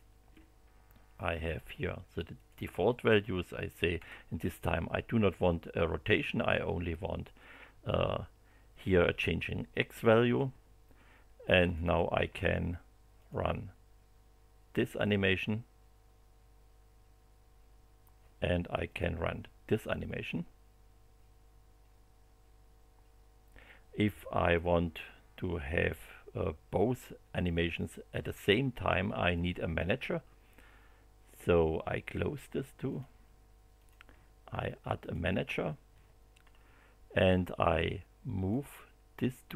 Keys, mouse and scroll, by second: 2.3 click, 3.9 0, 11.6 click, 13.2 click, 18.9 click, 32.9 click, 33.7 click, 35.0 click, 36.4 scroll down 1, 38.5-39.5 drag.